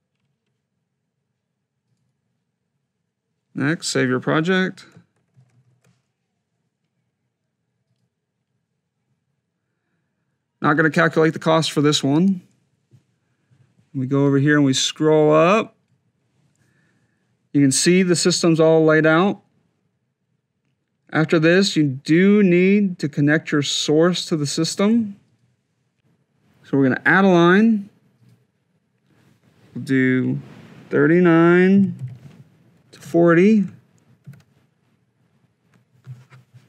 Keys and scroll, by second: 5.6 shift+e, 27.4 F2, 31.9 9, 32.8 Tab, 33.3 4, 34.0 Tab.